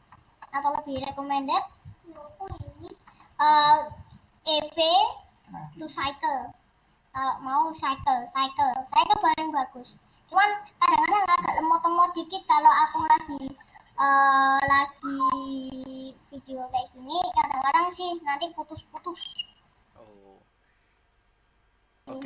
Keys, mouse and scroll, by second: 0.0 middle click, 0.4 scroll up 3, 0.8 h, 1.4 middle click, 2.3 scroll up 1, 3.0-10.7 middle drag, 10.9-18.5 middle drag, 18.5-19.0 scroll up 1, 19.0 middle click, 19.2-21.1 scroll down 1, 21.1-22.2 scroll down 1.